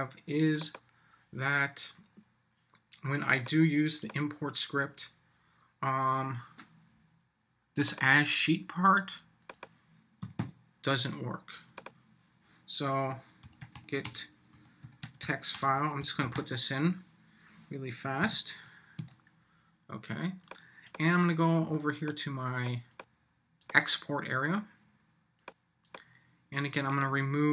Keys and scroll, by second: 18.2 shift+;, 19.0 super+s.